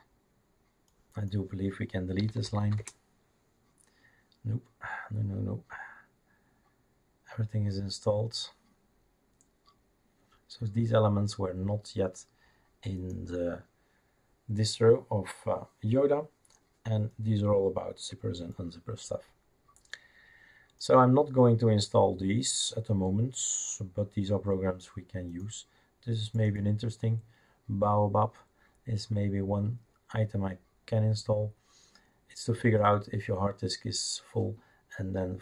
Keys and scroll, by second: 2.0-4.0 typing.